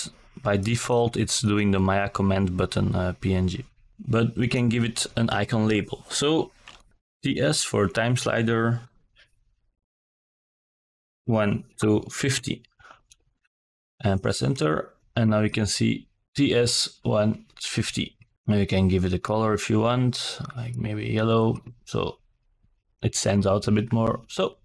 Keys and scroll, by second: 3.5 shift+t, 3.8 s, 5.5 shift+-, 7.8 KP_1, 8.4 shift+-, 8.9 KP_5, 9.0 KP_0, 11.2 Return.